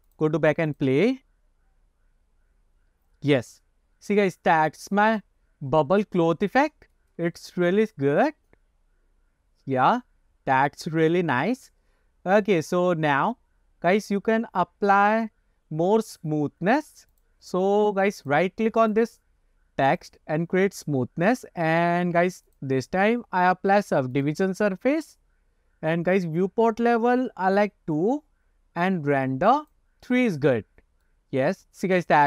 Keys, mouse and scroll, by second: 0.2 click, 0.8 click, 5.3 middle click, 7.5-7.9 shift+middle drag, 17.2 click, 17.8 middle click, 18.3 click, 18.9 right click, 21.7 click, 22.6-24.8 drag, 27.6 click, 29.7 click, 31.2 middle click, 31.9-32.2 scroll up 3.